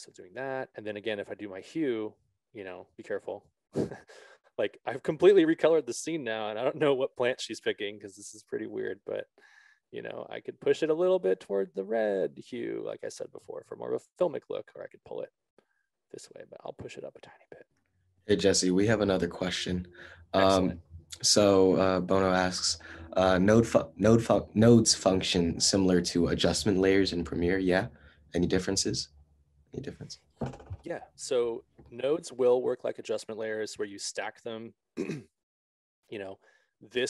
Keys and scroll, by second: 9.4 ctrl+z.